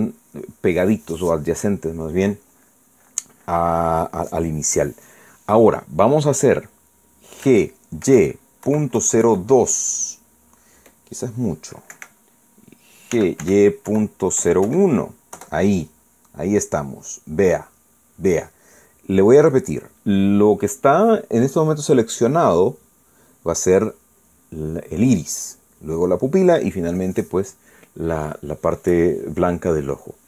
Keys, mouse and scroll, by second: 8.4-10.2 typing, 12.9 Escape, 13.9-15.6 typing, 16.3 KP_Enter.